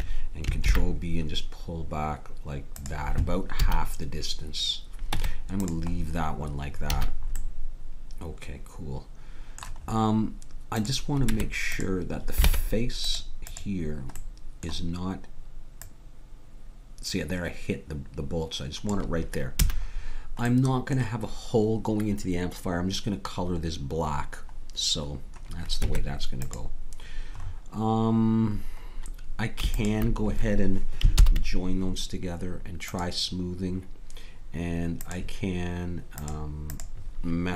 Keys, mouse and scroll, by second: 0.6 ctrl+b, 3.7 a, 5.1 Tab, 7.0 a, 10.8-12.7 drag, 11.3 Tab, 12.5 ctrl+Tab, 13.5-14.6 drag, 15.8-17.6 drag, 19.6 a, 25.9 Tab, 29.7-31.4 drag, 31.2 ctrl+j, 32.9 click, 35.0-37.5 drag.